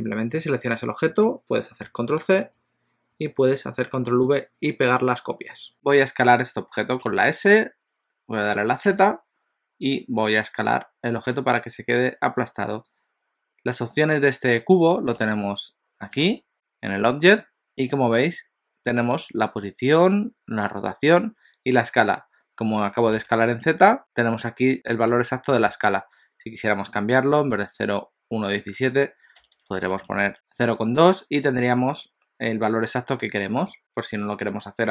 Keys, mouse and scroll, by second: 1.8 ctrl+c, 2.6 ctrl+v, 3.2 ctrl+v, 5.7 click, 7.1 s, 26.7 click, 29.5 BackSpace, 29.7 BackSpace, 30.2 BackSpace.